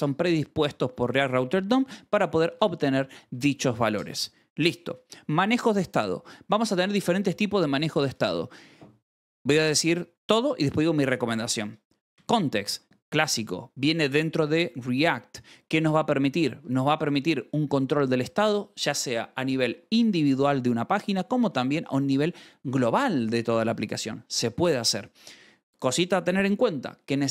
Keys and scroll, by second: 0.4 k, 0.9 shift+v, 1.6 j, 2.5 shift+v, 3.2 Escape, 4.9-6.0 typing, 12.0 shift+v, 12.5 Escape, 16.2 j, 16.5 shift+v, 16.9 Escape, 21.8 shift+v, 22.3 Escape.